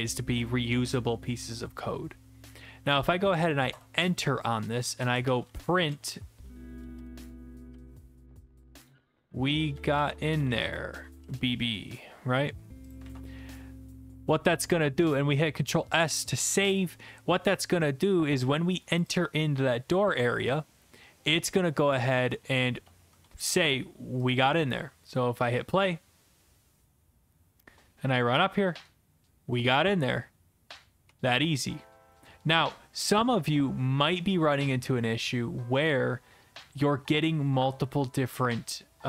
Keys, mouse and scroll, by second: 3.0 click, 3.7 Return, 4.7-11.6 typing, 13.4 ctrl+s, 13.4 click, 19.0 click, 19.1 click, 24.3 click, 27.4-28.8 w, 31.0-32.0 s, 32.5 alt+F4, 35.2 click, 35.3 click, 38.4 click.